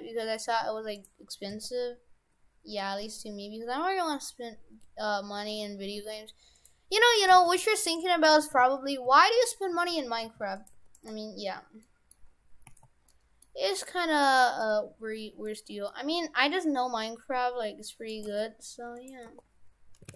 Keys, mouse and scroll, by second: 1.6 s, 7.2 right click, 7.4 shift+f, 8.0 Tab, 8.4 shift+f, 10.8 Tab, 11.0 right click, 11.8 middle click, 12.4 scroll down 3, 12.7 a, 13.1 middle click, 13.8 g, 18.3 g, 19.3 r.